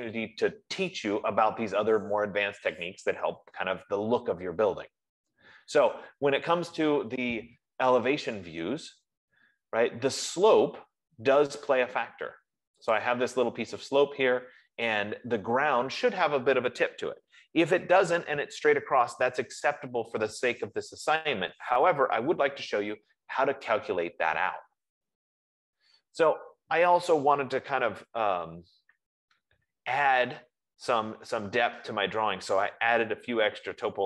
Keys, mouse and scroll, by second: 9.2-13.0 middle drag, 13.0-13.5 scroll, 13.5 click, 14.0 F15, 16.8-18.4 drag, 24.7 middle click, 25.2-26.0 scroll, 26.3-27.0 scroll, 28.4 Escape, 29.5 scroll, 31.1-34.0 middle drag.